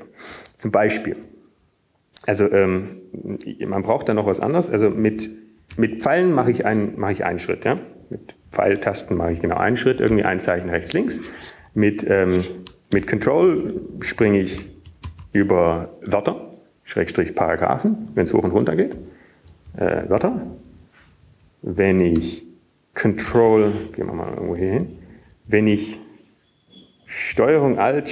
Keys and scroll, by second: 0.0-0.6 typing, 3.1 Up, 3.7 Up, 3.8-4.3 Up, 4.3 Down, 5.8 Down, 8.0 Up, 8.0 ctrl+Right, 8.9 ctrl+Right, 9.0-14.5 typing, 15.9 typing, 17.2-19.0 typing, 22.4 ctrl+Up, 23.2 ctrl+Right, 24.2 ctrl+Right, 25.7 Down, 25.9 Up, 26.5 Up, 27.0 Up.